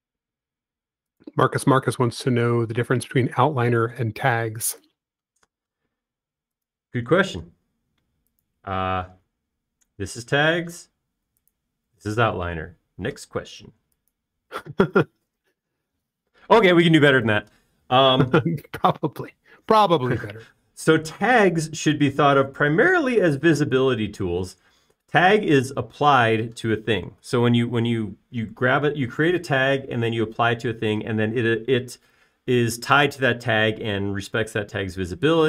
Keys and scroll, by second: 5.8 i, 10.2 space, 14.5-15.5 typing.